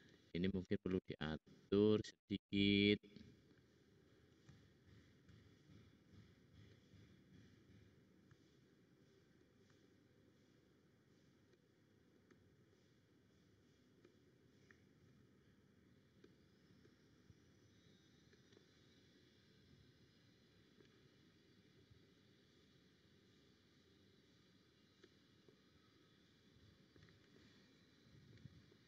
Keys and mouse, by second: 0.9 `, 2.6 click, 4.5 shift+click, 5.4-7.7 drag, 8.2-9.6 shift+drag, 9.1 shift+middle click, 9.1 shift+right click, 9.9-12.1 drag, 12.7-14.3 drag, 12.7-14.3 middle drag, 12.7-14.3 right drag, 14.6 click, 16.2 click, 17.4 click, 21.7 middle click, 21.8 click.